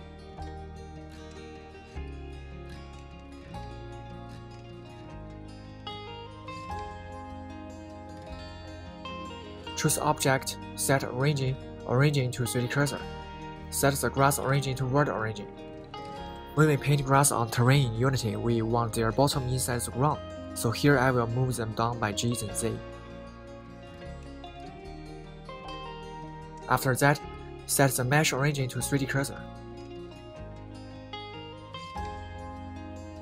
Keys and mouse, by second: 1.2 click, 1.4-2.8 right drag, 2.8 s, 3.3-3.9 middle drag, 4.3 KP_1, 4.9-5.8 middle drag, 6.0-6.8 middle drag, 6.9-8.2 middle drag, 8.5 KP_1, 10.5-13.3 right drag, 15.0-15.4 shift+middle drag, 23.0 g, 23.2 z, 25.1 click, 26.7-30.5 drag.